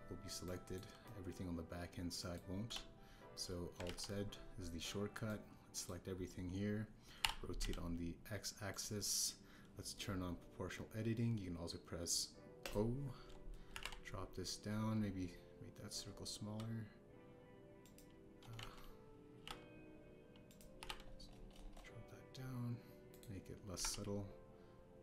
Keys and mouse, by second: 0.1 KP_1, 0.7 KP_3, 1.4 click, 2.0-3.3 drag, 3.6 KP_3, 4.8 alt+z, 6.2 click, 8.2 r, 8.6 x, 13.6 click, 14.7 g, 14.7 z, 19.5 ctrl+z, 20.3 r, 20.4 z, 21.7 r, 21.8 x, 24.1 click, 24.7 g, 24.8 z.